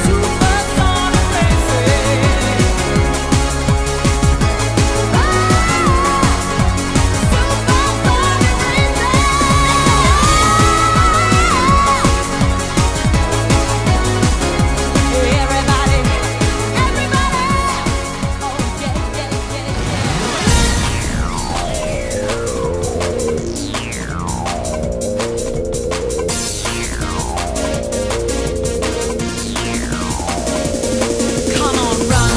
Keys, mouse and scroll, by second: 2.8 click, 5.5 click, 6.1 click, 10.0 KP_1, 15.4 click, 18.8 click, 22.9 click, 22.9 n, 25.4 click, 27.6 scroll up 1, 29.0-30.6 scroll up 1, 30.6 click, 31.4 middle click.